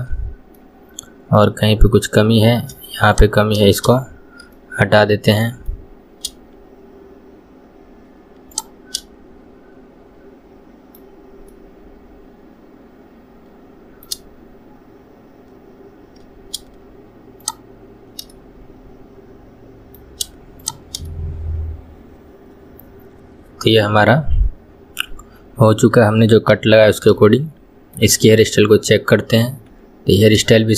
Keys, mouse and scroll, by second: 0.2 scroll down 1, 0.6-3.2 middle drag, 3.2 shift+click, 4.6-6.0 middle drag, 6.0-8.2 scroll up 1, 8.2-8.6 scroll up 1, 8.6 shift+click, 9.0-11.0 middle drag, 11.0 scroll up 1, 11.2-11.5 scroll down 2, 11.5-14.7 middle drag, 17.5 shift+click, 18.3-20.7 middle drag, 20.7 shift+click, 21.1-24.1 middle drag, 26.6 KP_1, 27.3-30.3 shift+middle drag, 30.6-30.7 shift+middle drag.